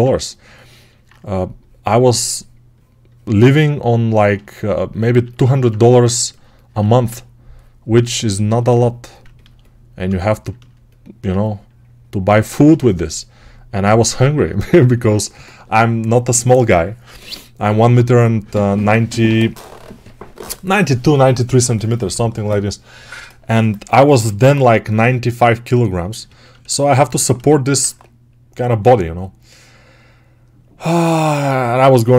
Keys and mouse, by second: 6.6 1, 24.0 g.